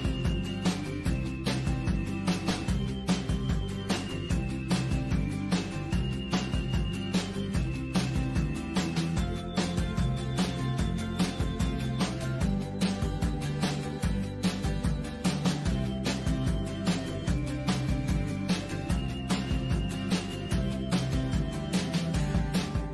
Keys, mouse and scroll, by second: 0.0 click, 0.4 click, 11.5 click, 11.6 click, 11.8 click, 12.0 click, 12.1 click, 12.8 click, 12.9 z, 13.0 click, 13.1 click, 13.3 click, 13.6 click, 13.8 click, 14.4 click, 14.6 click, 14.7 click, 15.1 click, 15.6 click, 16.3 click, 16.6-22.9 drag.